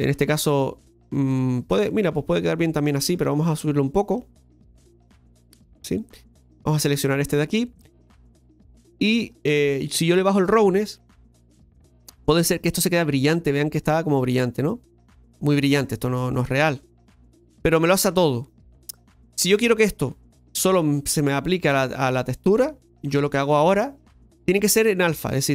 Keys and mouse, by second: 1.2-2.9 middle drag, 4.1-5.8 drag, 6.3-7.8 right drag, 7.8-9.3 middle drag, 10.1-12.7 drag, 12.7-16.9 middle drag, 16.9-23.6 drag, 23.6 middle click.